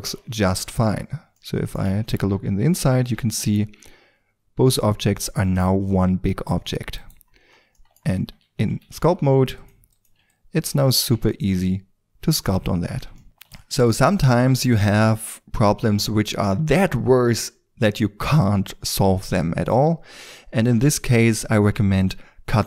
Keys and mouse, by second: 0.6 KP_5, 1.3 KP_5, 3.3 shift+f, 7.3 middle click, 7.4-7.9 middle drag, 8.1 Tab, 8.8 ctrl+d, 9.3 f, 12.6-13.1 drag, 13.4 shift+space.